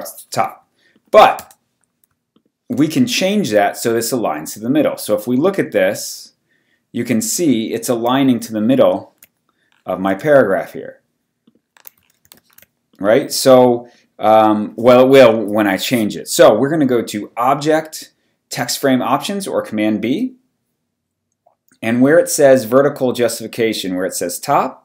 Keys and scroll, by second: 1.4 BackSpace, 2.7 BackSpace, 3.3 v, 8.8 ctrl+super+h, 10.1 w, 12.2 ctrl+super+w, 12.3 ctrl+super+h.